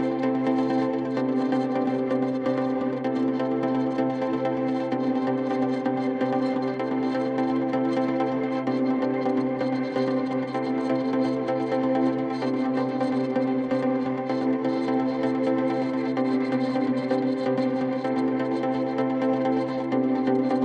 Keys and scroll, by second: 8.1 typing, 10.0-14.1 typing.